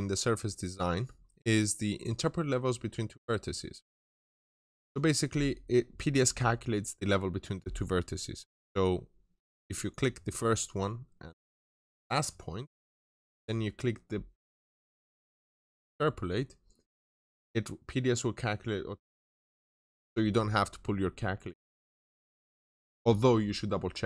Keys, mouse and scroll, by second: 4.9-8.0 scroll up 1, 9.7 click, 17.3-18.4 scroll up 1, 18.9-21.7 scroll down 1.